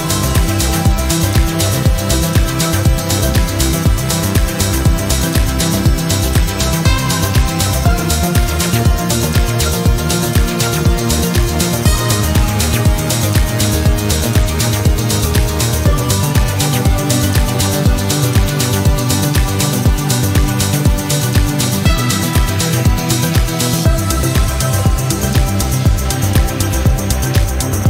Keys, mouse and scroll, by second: 14.6 click, 15.3 click, 17.1 5, 18.5 click, 24.4 click, 25.3 click, 26.5 2, 27.3 click.